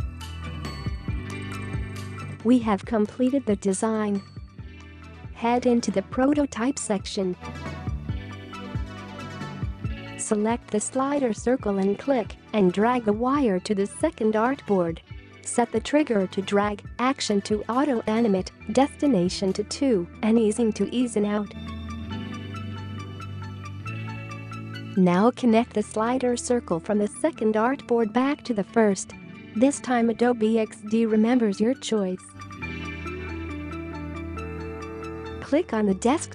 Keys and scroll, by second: 34.6 space.